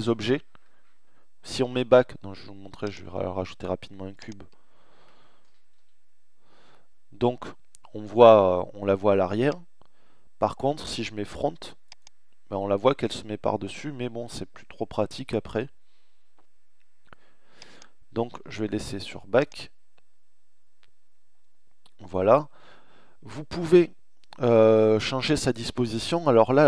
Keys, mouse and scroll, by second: 4.4 e, 4.8 z, 8.4 middle click, 10.3 middle click, 14.4-16.5 middle drag, 17.8 Delete.